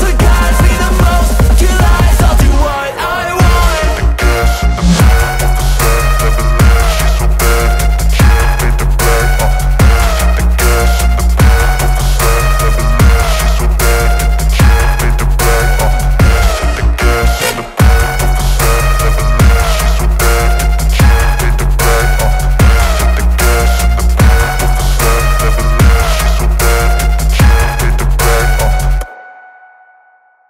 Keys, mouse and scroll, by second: 0.7-4.1 alt+drag, 5.5-6.8 drag, 12.3-12.7 click, 16.5-16.9 click, 18.9-20.1 drag.